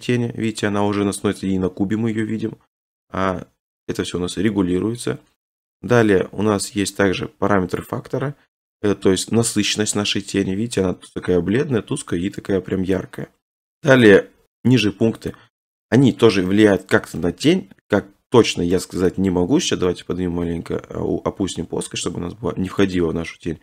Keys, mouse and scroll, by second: 5.0 click, 13.0 click, 13.5 click, 15.3 click, 18.7 middle click, 19.1 click, 19.4 g, 19.6 z, 22.8 click.